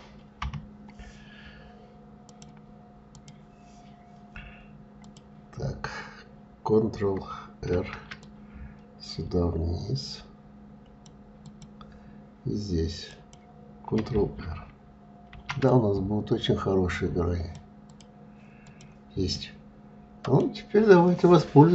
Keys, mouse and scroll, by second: 0.0 KP_3, 1.8-4.7 drag, 7.3 ctrl+r, 12.7 click, 14.9 ctrl+r, 18.2 click, 18.9-21.7 middle drag.